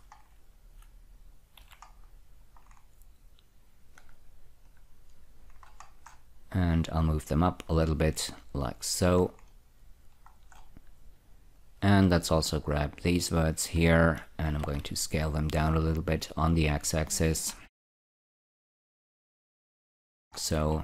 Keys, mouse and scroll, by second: 0.5-1.9 scroll up 3, 1.9 w, 2.2 scroll up 2, 2.9 scroll down 4, 4.3 click, 5.0 click, 5.8-7.3 scroll up 5, 7.3-9.5 drag, 9.5-10.6 scroll down 4, 10.6 scroll up 1, 11.9-13.5 drag, 14.7 space, 14.9 s, 16.4-18.0 drag, 18.6 ctrl+z, 19.8 click, 20.7-20.8 scroll down 2.